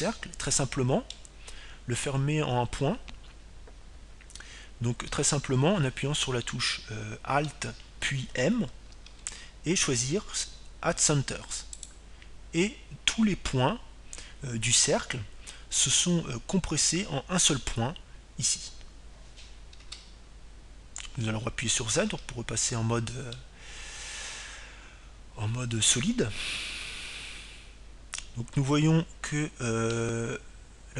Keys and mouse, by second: 2.0-4.0 middle drag, 11.5 alt+m, 22.6 Tab, 24.8 z, 26.1-28.2 middle drag.